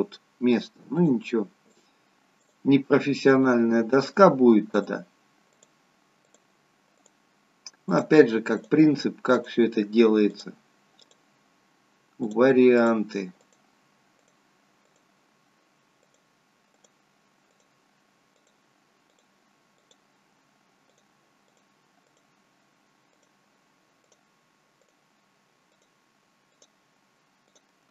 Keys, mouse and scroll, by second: 1.0-27.9 shift+click.